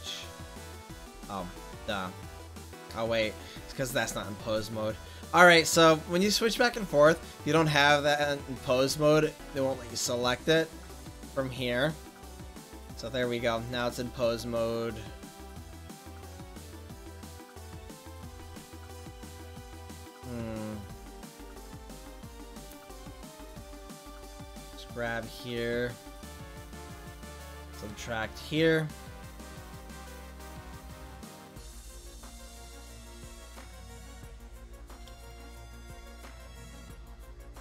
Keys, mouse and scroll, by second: 15.8-17.1 drag, 18.7 ctrl+z, 31.4-33.1 drag, 36.3-37.6 drag.